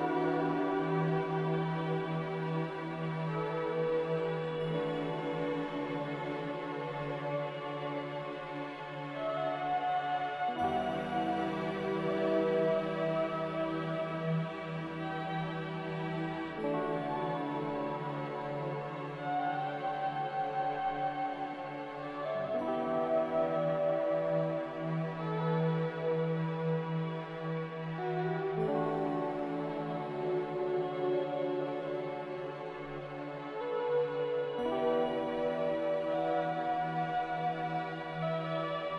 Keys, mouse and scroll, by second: 13.3 z.